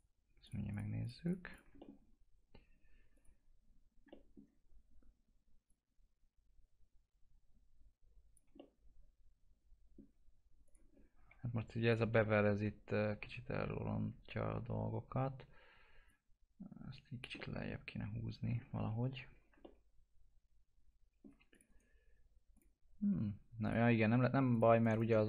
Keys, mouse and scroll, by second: 1.8 middle click, 3.1 click, 4.2 alt+middle click, 5.7 click, 8.5-10.6 alt+middle drag, 10.6 click, 10.9-11.3 scroll up 1, 11.3 1, 11.8 click, 12.2-17.2 alt+middle drag, 17.4-19.0 alt+middle drag, 19.0 ctrl+z, 19.6-21.5 alt+middle drag, 21.5 click, 21.7 right click, 22.5 click, 24.7 right click, 25.1 alt+middle click.